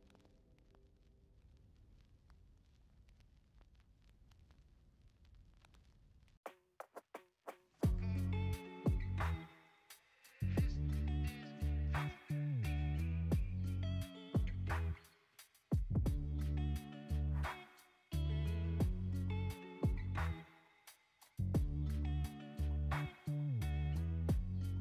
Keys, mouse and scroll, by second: 2.2 ctrl+r, 5.2 Tab, 10.0-16.1 drag, 16.1 space, 18.2 space, 18.6-21.5 middle drag, 21.5-24.0 drag, 24.0 space.